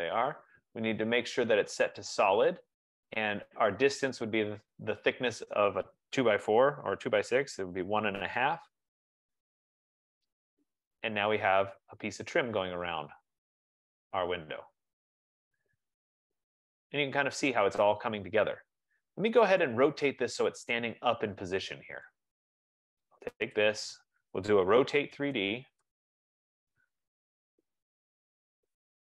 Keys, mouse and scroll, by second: 2.7-7.4 drag, 7.6-8.9 typing, 9.8 click, 11.1-11.4 scroll, 17.3 right click, 17.6-17.9 scroll, 18.4-18.8 scroll, 19.8 right click, 22.3 right click, 23.7 click, 24.6-26.4 typing, 27.9 middle click, 28.3 middle click.